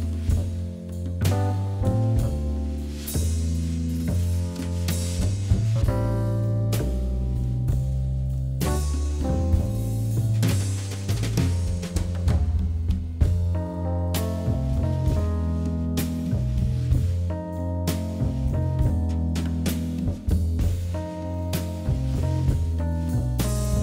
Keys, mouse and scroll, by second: 0.9 KP_7, 1.4-1.8 scroll down 2, 1.8 shift+z, 2.4 shift+a, 4.4 KP_1, 5.1 s, 6.6 g, 7.8 s, 9.5 shift+z, 10.0-11.2 middle drag, 11.2 KP_7, 11.8 scroll up 2, 12.1-13.0 shift+middle drag, 13.0 d, 14.3 g, 15.9 KP_1, 16.5-17.0 middle drag, 17.0-18.2 scroll up 4, 18.2 g, 19.7 scroll down 1, 20.0-21.5 middle drag, 21.9 s.